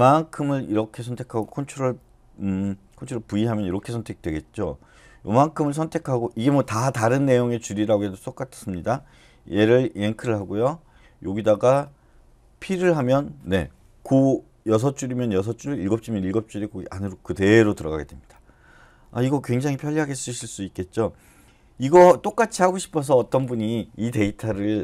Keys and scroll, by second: 3.1 ctrl+v, 9.9 y, 12.7 p, 21.7 u.